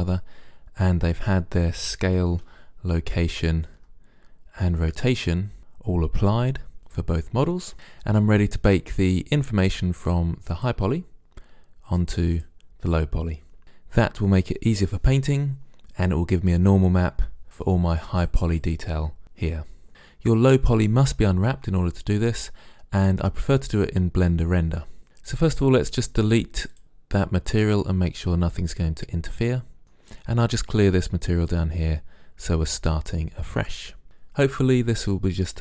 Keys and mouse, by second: 2.4 n, 6.9 click, 7.7 n, 10.6-13.6 drag, 17.7-21.2 drag, 25.3-28.6 drag, 29.8-31.4 middle drag, 31.4-32.8 drag, 32.8-34.0 middle drag, 34.0 click.